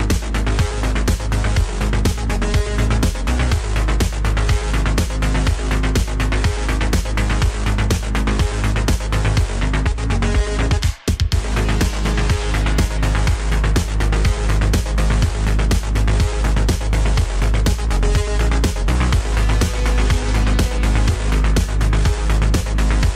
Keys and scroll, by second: 4.9 e, 6.6 g, 7.2 g, 7.9 Tab, 9.7 Tab, 10.1 g, 12.1 g, 12.3 Tab, 13.7 Tab, 13.9 g, 14.4 Tab, 15.5 Tab, 20.6 g, 21.6 g.